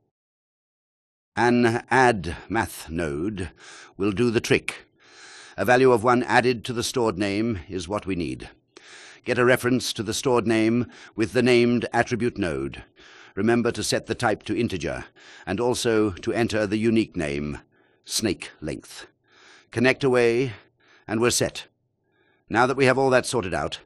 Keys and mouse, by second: 3.6-5.4 drag, 8.7 shift+a, 12.7-14.3 drag, 15.5-16.4 drag, 19.2-20.2 drag.